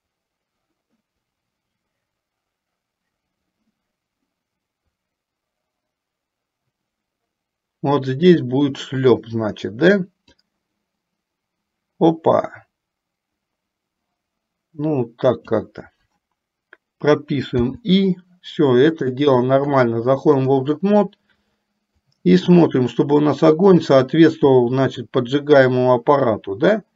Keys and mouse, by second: 10.3-15.8 drag, 17.7 i, 22.2-26.9 drag.